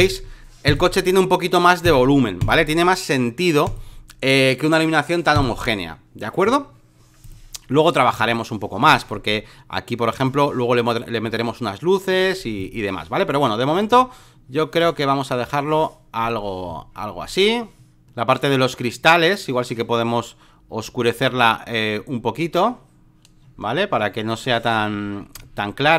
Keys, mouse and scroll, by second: 8.1 ctrl+z, 8.9-10.2 alt+middle drag, 10.2 click, 11.2 ctrl+z, 12.6-16.6 drag, 16.7 alt+middle click, 17.2 alt+middle click, 18.0-25.9 drag.